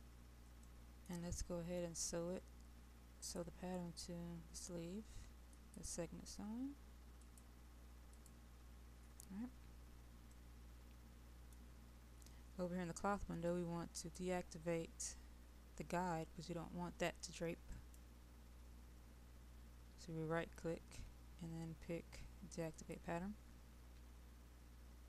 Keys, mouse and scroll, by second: 0.0-0.7 scroll up 1, 0.7-2.0 middle drag, 3.2 click, 9.4-10.3 scroll up 1, 10.3-12.0 middle drag, 14.1 click, 23.8-25.0 drag.